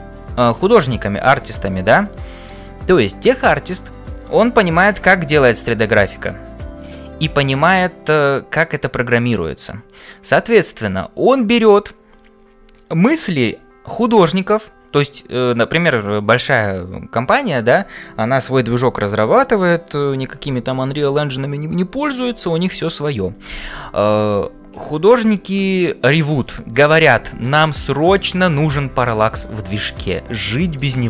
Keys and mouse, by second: 24.8 shift+middle click, 28.0 middle click, 28.8 j, 30.5 shift+middle click.